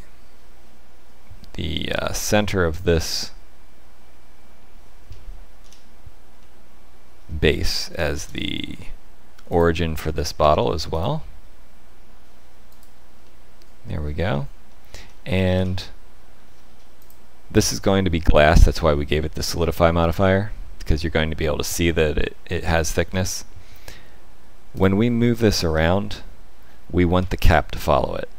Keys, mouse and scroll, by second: 1.9 1, 2.1 click, 2.6 middle click, 6.3 middle click, 8.1 shift+s, 10.3 Tab, 10.9 right click, 13.2 middle click, 13.9-14.9 scroll down 5, 14.6 middle click, 16.3-16.9 scroll down 3, 16.9 click, 18.6 middle click, 19.1 KP_Divide, 20.0 middle click, 21.5 middle click, 23.0 middle click, 24.7 click, 25.7 g.